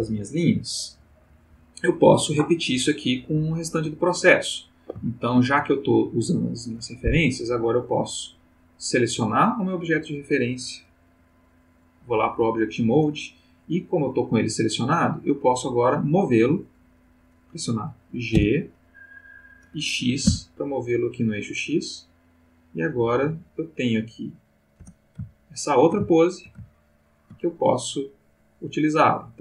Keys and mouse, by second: 4.1 ctrl+click, 5.1 ctrl+shift+middle click, 9.2 click, 10.8 click, 11.7 click, 14.3 click, 18.3 g, 20.3 x, 24.8 space, 25.3-27.5 ctrl+middle drag.